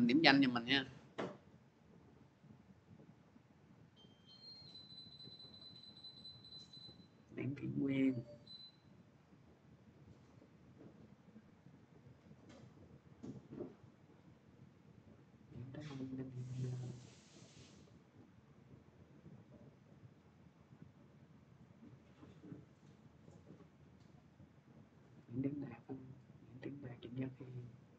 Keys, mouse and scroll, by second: 1.4 click, 3.2 click, 5.5 click, 8.0 click, 10.9 click, 11.5 x, 11.8 click, 12.8 click, 16.5 click, 18.6 click, 18.6 x, 19.2 click, 21.1 click, 21.2 x, 21.6 click, 22.6 click.